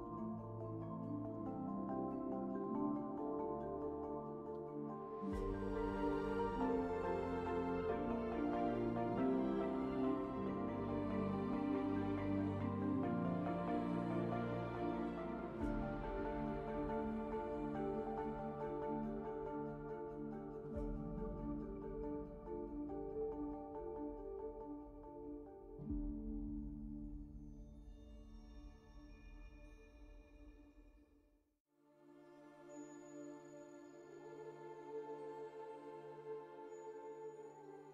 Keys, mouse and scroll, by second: 5.2 alt+c, 15.8 5, 16.0 d, 19.5 5, 20.5 1, 22.4 alt+c, 36.2 5, 36.3 d.